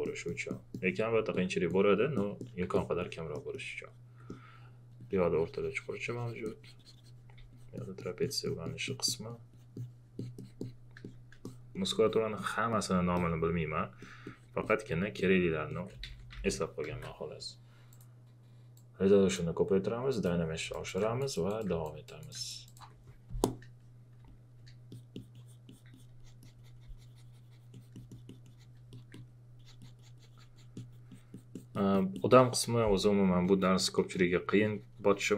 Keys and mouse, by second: 1.3 alt+click, 3.3 alt+click, 4.1 alt+click, 4.9 alt+click, 11.0 click, 12.0 alt+click, 13.1 alt+click, 14.6 alt+click, 16.0 shift+f, 16.9 ctrl+z, 17.9-20.1 drag, 20.7 alt+click, 21.3 alt+click, 22.0 alt+click, 22.7 alt+click, 24.2 space, 24.2 click.